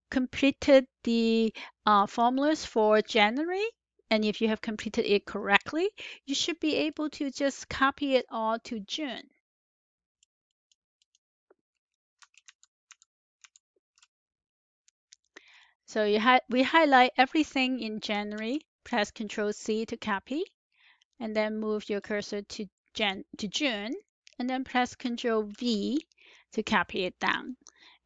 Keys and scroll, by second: 12.3 ctrl+shift+Down, 12.8 ctrl+shift+Down, 13.3 ctrl+shift+Down, 18.3 ctrl+c, 25.4 ctrl+v.